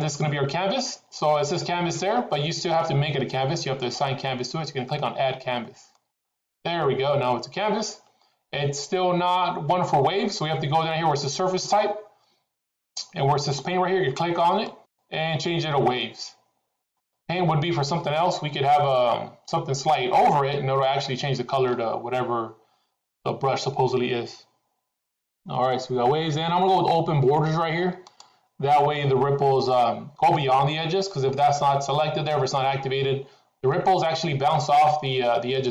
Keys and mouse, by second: 5.9 click, 14.7-16.9 drag, 27.9 click.